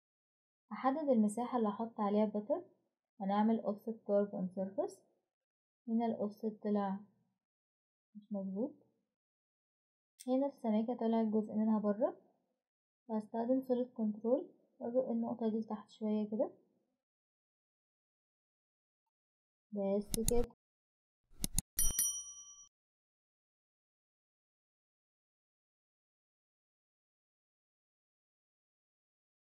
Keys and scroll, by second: 3.0-4.6 typing, 8.1 ctrl+z, 8.4 Escape, 11.9 typing, 15.6 Escape.